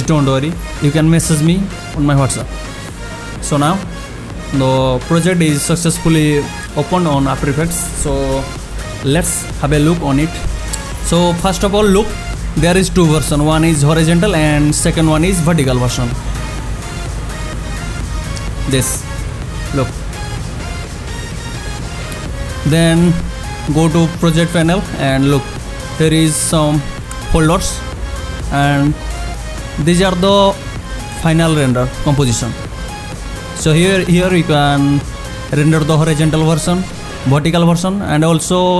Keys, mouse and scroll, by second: 5.9 click, 15.6 click, 24.7 click, 37.2 click.